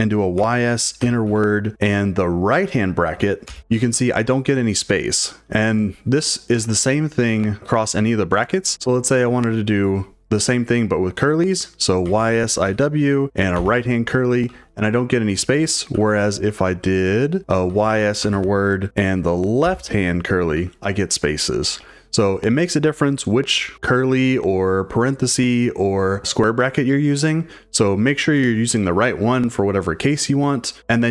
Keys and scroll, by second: 0.1-1.7 typing, 3.2-4.3 typing, 7.4 u, 11.8-14.4 typing, 15.6-20.6 typing, 21.6 typing, 30.5-31.1 typing.